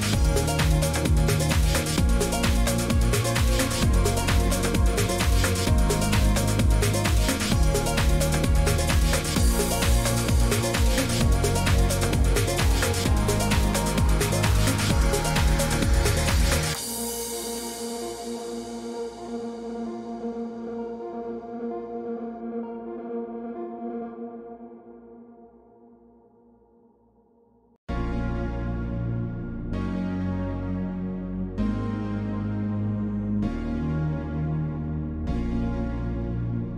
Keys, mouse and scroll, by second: 0.6 click, 1.6 click, 1.8 click, 2.7 click, 2.8 scroll down 1, 3.5 scroll down 1, 9.9-11.4 drag, 14.8 click, 16.4 click, 17.0 click, 17.9 shift+click, 18.0 shift+click, 19.4 click, 20.3 click, 22.3 click, 27.8 click, 29.8 click, 35.0 click, 35.8 click.